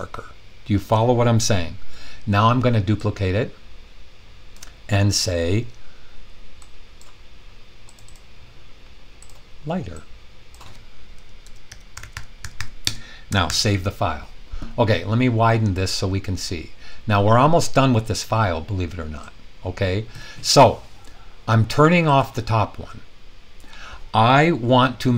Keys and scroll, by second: 11.1-13.0 typing, 13.4 super+s.